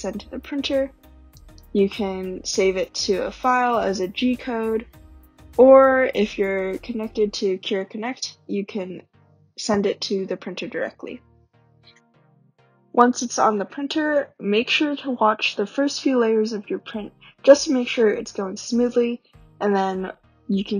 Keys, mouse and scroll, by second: 11.7 scroll down 1.